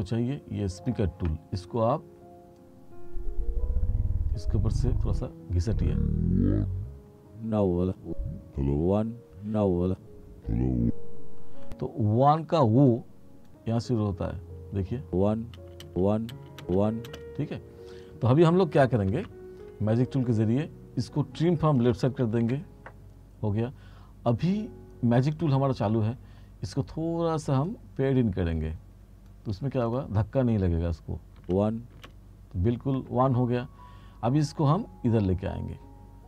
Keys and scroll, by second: 15.1 space, 19.2 F7, 22.5 a, 31.5 space.